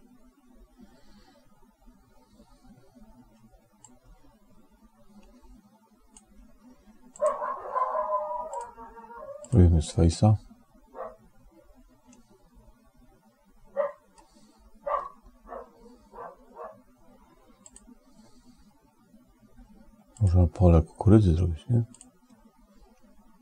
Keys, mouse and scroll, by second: 3.8-6.4 drag, 7.0 click, 8.3-10.5 drag, 12.0-14.1 middle drag, 18.6 click, 21.1 click, 22.9 click.